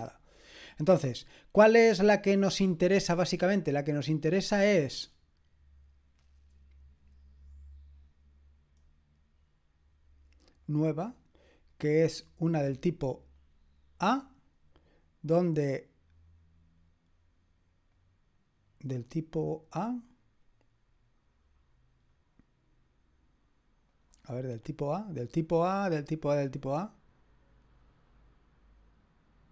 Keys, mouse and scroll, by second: 10.6 click, 13.3 click, 15.3 click, 17.9 click, 23.9 click, 24.3-24.8 scroll down 2, 25.3-26.3 scroll down 2, 26.3-29.5 scroll up 1.